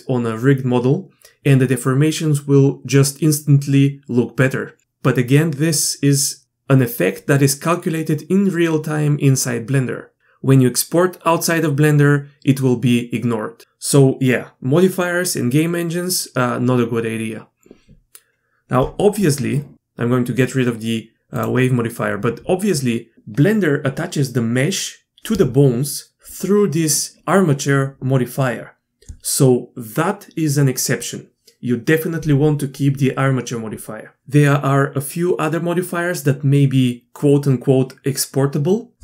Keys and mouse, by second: 21.3 click, 23.1 alt+a.